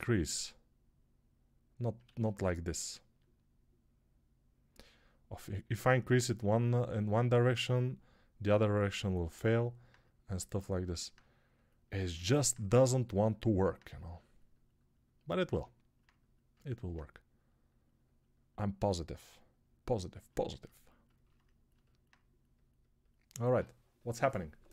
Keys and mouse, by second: 1.9 ctrl+z.